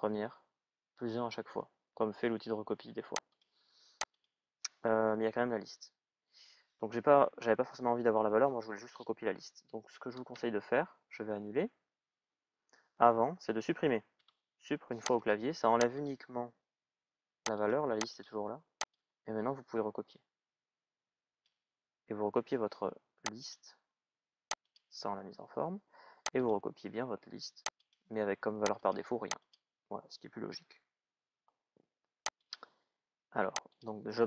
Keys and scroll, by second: 10.1 ctrl+z, 13.9 Delete.